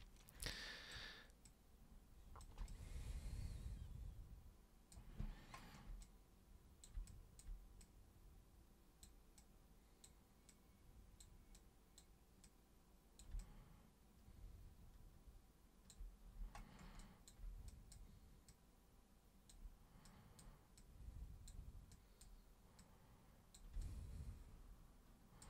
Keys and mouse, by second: 0.5 super+click, 1.5 super+click, 2.7-4.9 alt+super+drag, 6.0 super+click, 7.0-7.4 alt+super+drag, 7.8-9.0 super+drag, 9.3 super+click, 10.5 super+click, 11.5 super+click, 12.4 super+click, 13.3-15.9 alt+super+drag, 17.0 alt+super+click, 17.6 super+drag, 18.4-19.5 super+drag, 20.0 super+click, 20.8 super+click, 21.9 super+click, 22.8 super+click, 23.8-25.4 alt+super+drag.